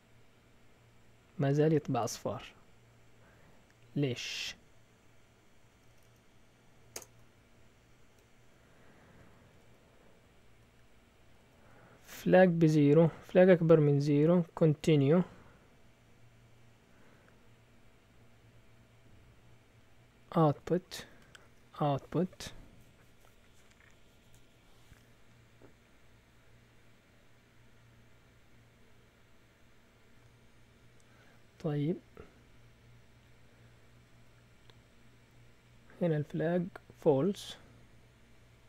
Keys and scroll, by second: 5.9 Up, 6.0 Up, 6.9 Return, 7.2 Down, 7.8 Down, 7.8-9.6 typing, 13.3 typing, 14.7 typing, 16.9 typing, 20.6-21.6 typing, 33.9 typing.